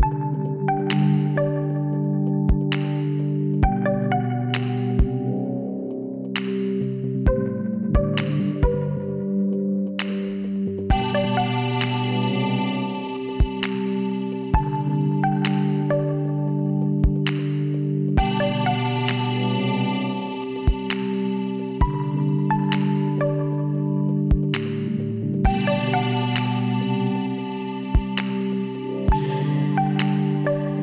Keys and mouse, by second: 3.7 middle click, 4.6 z, 7.7-9.6 drag, 9.7-12.7 drag, 14.4-16.9 drag, 16.1 w, 23.5-27.3 middle drag, 25.1 a.